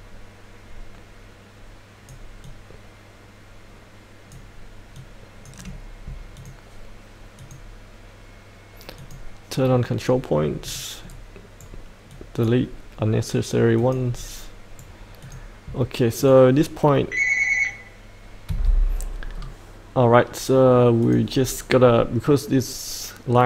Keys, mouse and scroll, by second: 11.1 right click, 12.1-13.2 drag, 14.2 right click, 15.2-17.2 drag, 18.5 F8, 19.3-21.0 scroll down 1, 21.0 click.